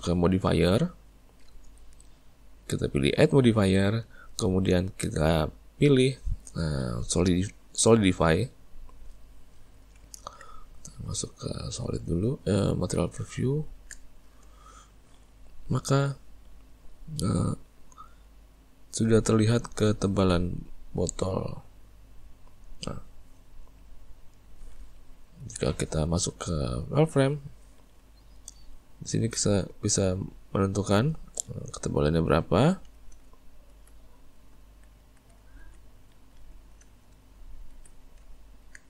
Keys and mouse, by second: 1.1 click, 3.7-6.9 drag, 9.6-10.5 middle drag, 10.5 z, 13.5-17.5 ctrl+middle drag, 17.8-20.8 drag, 23.7-24.9 middle drag, 24.9 `, 26.1 z, 28.7-31.8 drag, 34.2 middle click, 34.6 Tab, 35.0 Tab, 35.2 middle click, 35.6 alt+a, 35.8-37.2 middle drag, 37.2 z, 38.3-38.8 ctrl+middle drag.